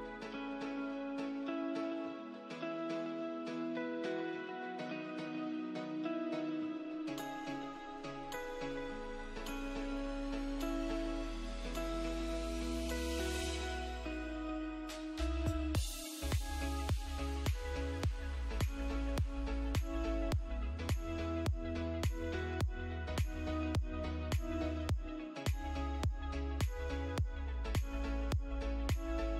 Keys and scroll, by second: 3.9 F2, 6.0 F2, 8.3 F3, 9.7 Escape, 13.4 Escape, 15.5 Escape, 16.1 F3, 18.6 Escape, 18.9 F2, 26.5 space.